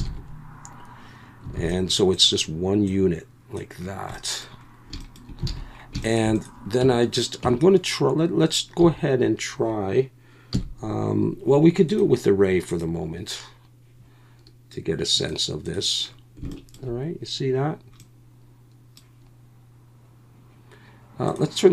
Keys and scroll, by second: 0.0 ctrl+j, 1.5 alt+a, 5.5 alt+a, 6.8 Tab, 7.4 Tab, 8.8 a, 10.5 KP_1.